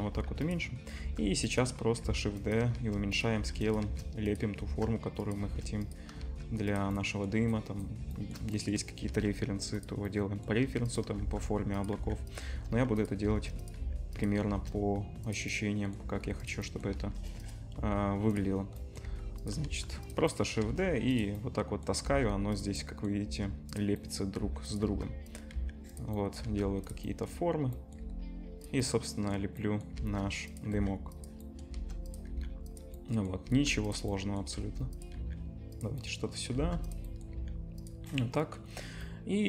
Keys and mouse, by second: 0.0-1.0 typing, 2.0-4.6 typing, 5.7 click, 5.7 shift+d, 5.7-6.1 middle drag, 6.1-11.2 shift+drag, 6.2 shift+d, 9.1 shift+d, 10.6-14.5 typing, 13.6-33.5 drag, 16.1 shift+d, 16.9 shift+d, 17.8 s, 19.0 g, 19.6 shift+d, 20.6 shift+d, 22.0 shift+d, 23.2 shift+d, 24.4 s, 24.9 shift+d, 25.5 s, 26.4 shift+d, 28.0 g, 30.0 shift+d, 30.7 s, 31.7 shift+d, 32.3 s, 33.5 shift+d, 34.6 shift+d, 35.2 s, 36.5 shift+d, 36.7-39.4 shift+drag, 37.3 s.